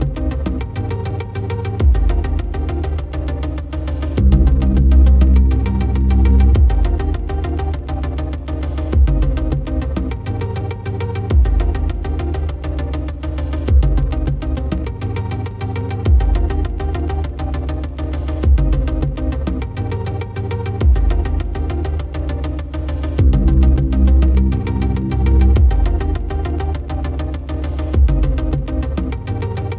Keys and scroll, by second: 0.1 ctrl+t, 9.2 ctrl+u, 19.1 ctrl+t.